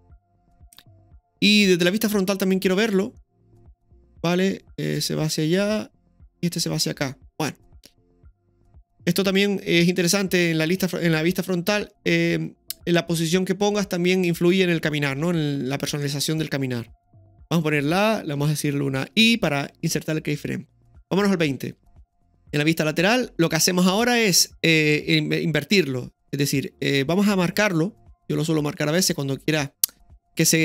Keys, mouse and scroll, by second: 0.1 click, 1.5-2.2 middle drag, 2.4 scroll down 1, 3.2-9.1 middle drag, 3.2-3.5 scroll down 1, 10.0 scroll up 1, 10.4-14.7 middle drag, 14.7-15.0 scroll down 1, 16.0-17.4 middle drag, 17.4 a, 19.1 i, 21.1 click, 22.0 scroll up 2, 22.0 KP_3, 22.3 shift+middle drag, 23.0-23.5 scroll up 1, 23.5-26.8 scroll down 1, 28.2 click, 29.5-30.6 drag.